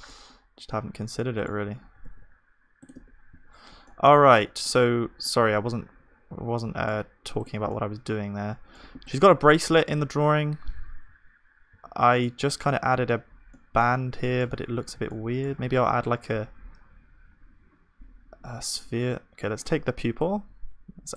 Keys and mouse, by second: 0.6 Tab, 1.9 g, 2.9 Tab, 2.9 middle click, 3.4 ctrl+s, 5.5 z, 7.8-11.1 drag, 7.8-11.1 middle drag, 9.5 z, 11.7 z, 13.5-14.6 middle drag, 15.6 shift+a, 18.3-20.1 middle drag, 20.1-21.1 drag, 20.1 shift+d.